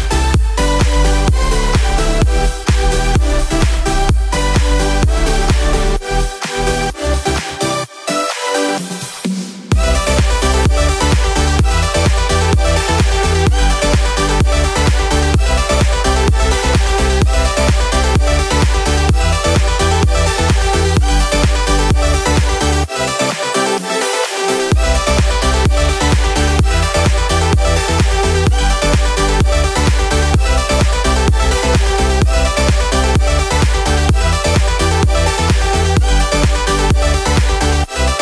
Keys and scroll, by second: 7.6 Delete, 9.4 Delete, 11.3 Delete, 12.6 Delete, 14.5 Delete, 24.5 ctrl+z.